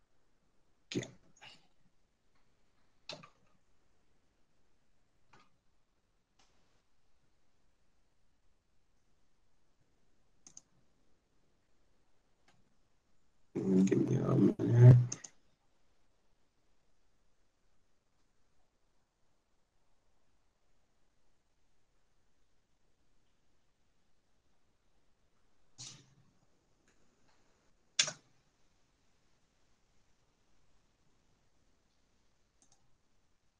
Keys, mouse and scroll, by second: 4.2 ctrl+z, 5.9 ctrl+z, 11.5 i, 17.4 i, 28.3 KP_0.